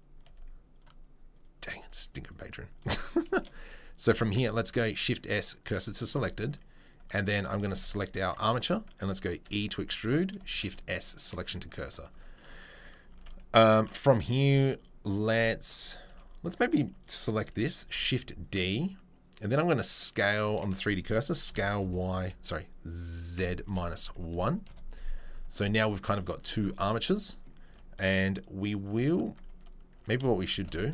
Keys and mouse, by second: 0.3 Tab, 0.7 click, 1.8 Tab, 2.2 click, 3.7 click, 4.2 shift+s, 6.1 Tab, 6.3 click, 6.5 Tab, 7.9 click, 8.3 Tab, 8.5 click, 9.4 e, 10.4-19.7 shift+middle drag, 10.5 shift+s, 12.1 Tab, 13.1 Tab, 15.3 Tab, 15.7 Tab, 16.1 a, 17.8 shift+d, 19.7-28.8 drag, 21.5 s, 27.7 Tab, 28.8 Tab, 29.2 Tab, 29.5 Tab, 30.0 Tab, 30.5 shift+s.